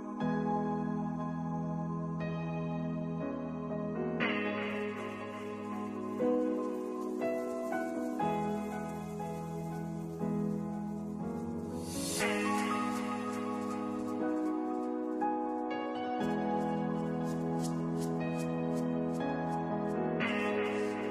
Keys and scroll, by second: 10.6 ctrl+s, 12.6 space.